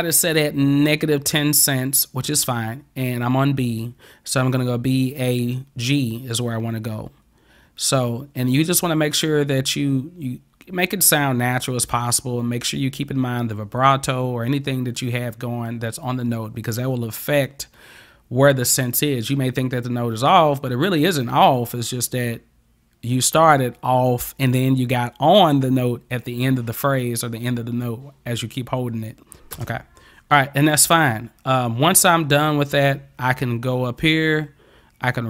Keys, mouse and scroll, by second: 29.6 space.